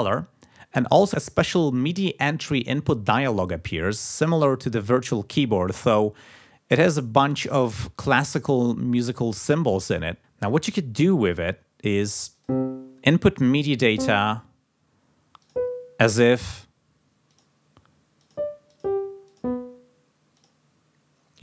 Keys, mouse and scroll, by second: 12.3 click, 13.7 click, 15.4 click, 17.3 click, 18.2 click, 18.7 click, 19.2 click, 20.3 click.